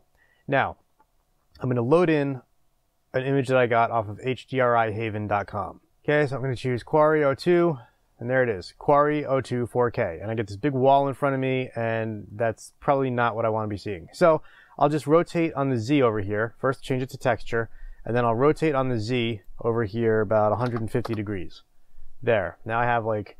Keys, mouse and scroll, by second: 7.1 click, 13.7-16.7 middle drag, 16.7 click, 21.0-23.3 drag, 21.6 Return.